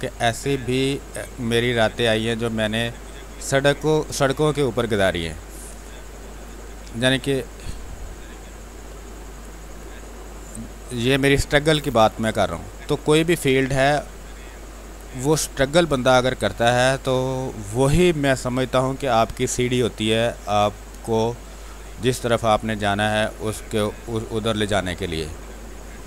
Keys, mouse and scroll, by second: 1.4 click, 2.4 space, 2.5 click, 2.9 space, 3.8-7.3 drag, 7.3-8.8 drag, 8.8 click, 9.7 space, 10.0 click, 10.2 space, 11.1 click, 12.0 space, 12.4 alt+click, 13.0 click, 13.8 ctrl+click, 14.8 click, 16.1-19.6 drag, 20.5 click, 21.5 space, 21.7 click, 22.0 space, 23.7-26.0 drag.